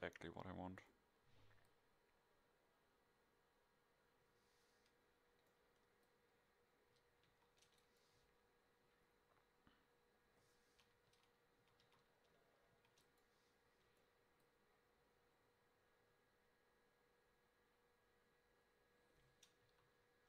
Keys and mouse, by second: 10.5 ctrl+s, 11.1 a, 11.6 a, 11.9 a, 13.6 ctrl+s.